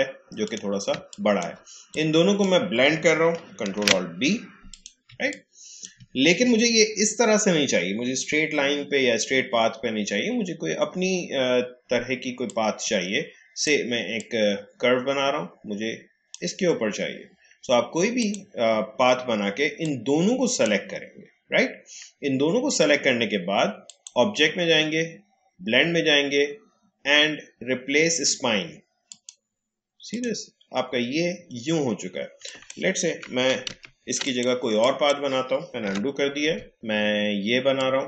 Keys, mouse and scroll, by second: 0.9 space, 1.1 click, 1.4 space, 1.9-3.7 drag, 3.7 ctrl+alt+b, 4.7 click, 5.0 space, 5.5 space, 6.1-6.4 alt+scroll down 1, 12.4-23.1 drag, 23.8 click, 29.0 click, 32.4 click, 33.7 ctrl+z, 34.2 click, 35.8 Delete, 36.7-38.0 drag.